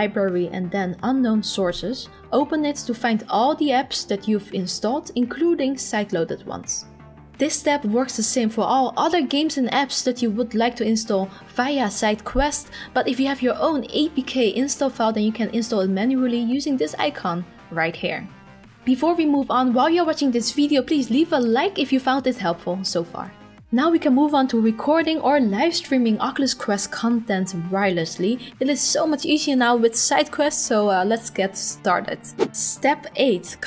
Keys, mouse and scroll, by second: 17.0 click.